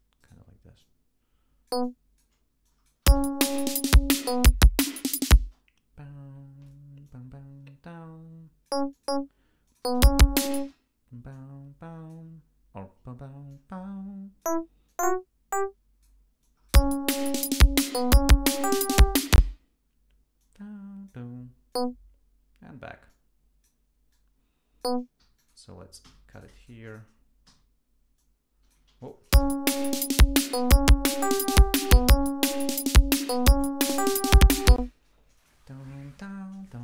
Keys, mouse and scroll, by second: 0.2 shift+right click, 0.8-2.4 shift+drag, 2.7 click, 3.1 space, 3.3 ctrl+scroll down 2, 5.5 space, 7.1-8.9 drag, 8.9 click, 9.7 click, 9.9 space, 10.7 space, 11.3-12.3 drag, 13.5-14.6 drag, 14.9-16.2 drag, 16.4 click, 16.8 space, 19.4 space, 20.4 click, 21.7 click, 23.1 click, 24.1 click, 25.2 g, 25.4 click, 26.0 s, 26.3 shift+click, 26.6 shift+right click, 27.5 alt+d, 28.2 click, 28.9 ctrl+y, 29.1 ctrl+click, 29.4 space, 30.0 ctrl+scroll up 1, 30.4 ctrl+scroll down 1, 31.6 click, 34.8 space, 35.4 click, 36.3 e.